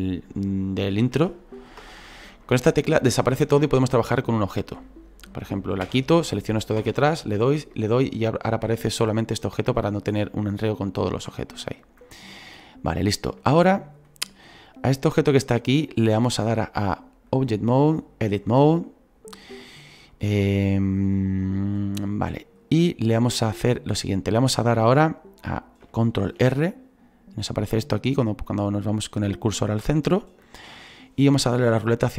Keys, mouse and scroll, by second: 3.8 middle click, 4.0 scroll up 2, 5.8 /, 8.5-32.1 shift+middle drag.